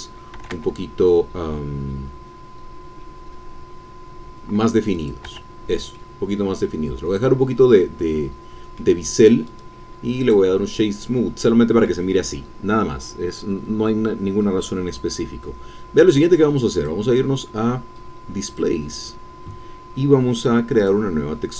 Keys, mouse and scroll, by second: 0.3 shift+e, 4.9 click, 5.3 Tab, 5.9-7.4 drag, 7.4-9.1 middle drag, 9.1-9.5 scroll up 1, 9.5 middle click, 9.5 right click, 10.2 click, 10.8-12.0 middle drag, 12.0-12.4 scroll down 1, 16.7 click, 18.5 click, 20.8-21.5 drag.